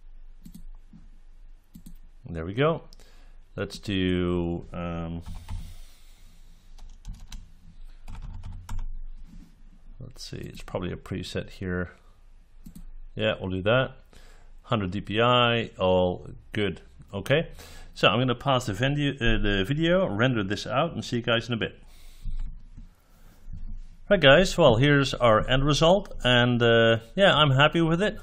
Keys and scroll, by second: 22.2 F9.